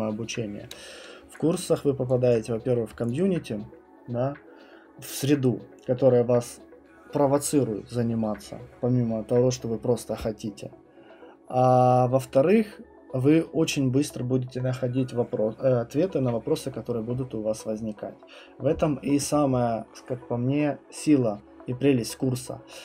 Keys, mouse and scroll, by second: 1.7 alt+click, 2.3 alt+click, 2.7 alt+middle click, 3.1 click.